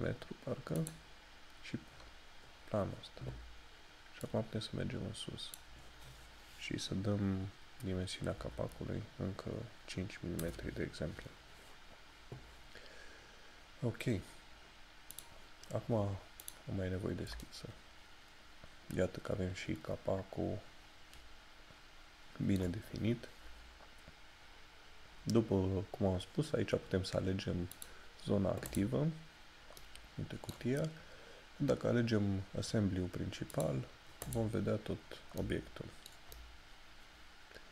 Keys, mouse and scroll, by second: 15.2 click, 17.5 middle click, 27.8 click, 29.9 middle click, 33.6 click, 35.1 scroll down 1, 35.5 middle click, 36.4 shift+middle click.